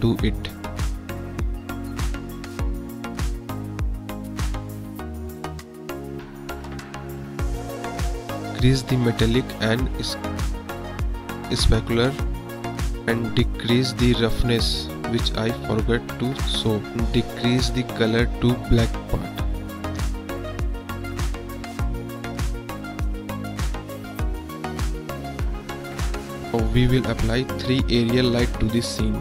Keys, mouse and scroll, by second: 0.4-1.5 drag, 2.4 KP_0, 2.9 click, 4.5 click, 6.0 KP_0, 6.7 click, 7.1 middle click, 7.3 click, 7.3 middle click, 7.5 click, 9.0 click, 10.7-12.8 drag, 14.0 click, 18.3 middle click, 21.3 click, 22.4 middle click, 24.8 click, 26.4 KP_0, 26.8 click, 27.9 shift+a.